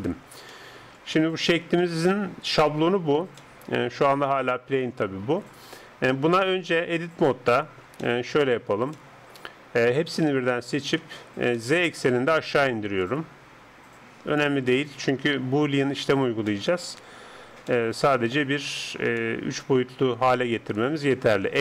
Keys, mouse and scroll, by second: 0.1-2.7 middle drag, 2.7 Tab, 3.4-4.6 middle drag, 5.3 KP_7, 7.1 Tab, 10.3 middle click, 10.3 a, 10.5 a, 10.9 a, 11.6-14.1 middle drag, 13.0-14.9 drag, 14.7-21.6 middle drag.